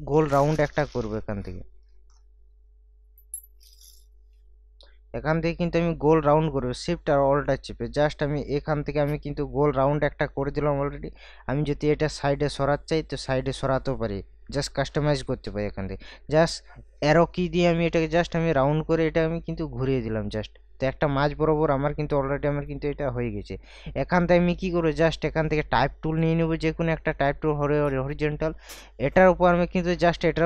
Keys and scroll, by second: 14.4 ctrl+t, 15.7 Right.